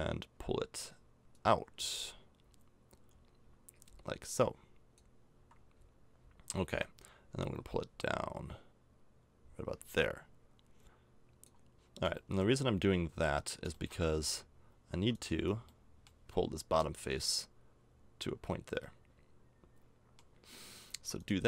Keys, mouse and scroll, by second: 6.1-11.4 middle drag, 11.7 middle click, 12.9-14.2 middle drag, 14.2 Tab, 14.9 Tab, 15.1 click, 15.3 Tab, 15.8 middle click, 20.9 Tab.